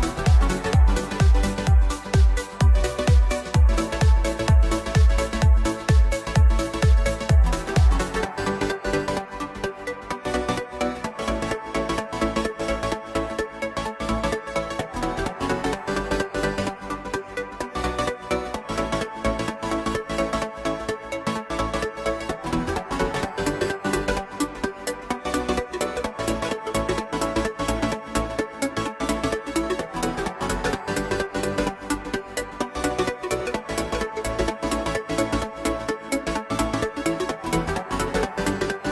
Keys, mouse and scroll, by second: 0.1 KP_1, 1.2 click, 1.6 click, 4.4 click, 4.9 click, 5.3 right click, 6.3 click, 6.8 scroll up 1, 7.1 shift+click, 7.6-8.1 middle drag, 8.1 Tab, 8.3 click, 9.4 click, 9.9 click, 10.3 x, 12.7 Tab, 13.9 click, 14.9 click, 20.1-21.6 drag, 22.4-24.0 drag, 24.9 click, 25.6 click, 26.1 Tab, 26.5 Tab, 26.8 click, 27.5-28.3 drag, 28.3 shift+a, 29.6-30.1 scroll down 5, 30.1 click, 30.8 KP_1, 31.3 scroll up 1, 31.9-32.5 shift+middle drag, 32.5 shift+d, 33.6 s, 35.0 click, 35.4-36.5 middle drag, 36.5 click, 37.1 scroll up 1, 37.4-38.4 shift+middle drag, 38.4 s.